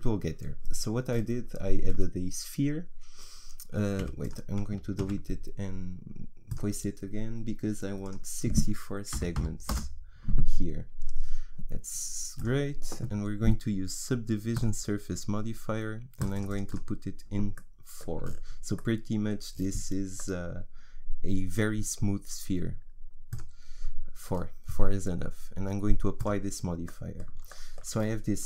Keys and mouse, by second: 4.0 Delete, 5.0 shift+a, 17.5 middle click, 18.3 click, 18.8-23.3 middle drag, 23.3-25.3 drag, 26.2 click, 26.9-28.0 middle drag.